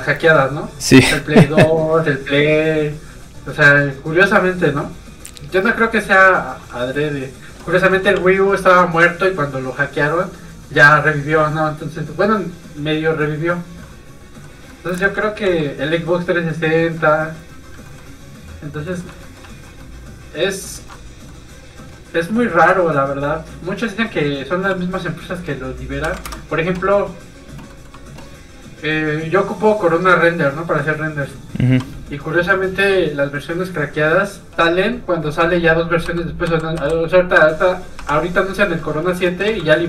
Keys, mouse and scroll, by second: 0.4 click, 7.9 shift+middle click, 8.2 middle click, 8.3 click, 13.9 middle click, 15.1 ctrl+z, 15.5 f, 15.7 click, 17.0 middle click, 19.1 shift+middle click, 19.5 alt+shift+z, 19.5 shift+middle click, 19.9 shift+middle click, 20.7 alt+shift+z, 21.0 shift+middle click, 21.1 middle click, 23.2 click, 26.1 KP_3, 27.7 Return, 27.7 middle click, 29.1 click, 35.5 i, 37.4 click, 38.0 1, 39.1 Return, 39.5 i.